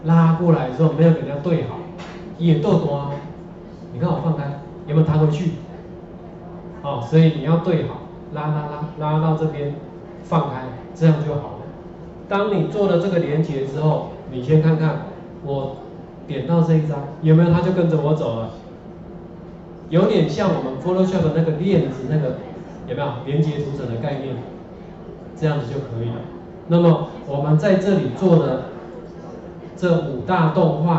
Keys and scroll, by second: 13.0 ctrl+4.